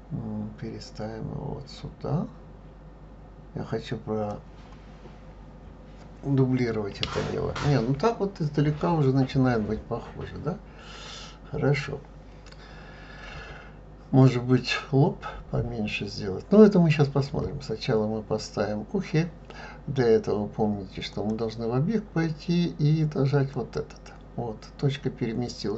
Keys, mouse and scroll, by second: 21.1-24.2 drag.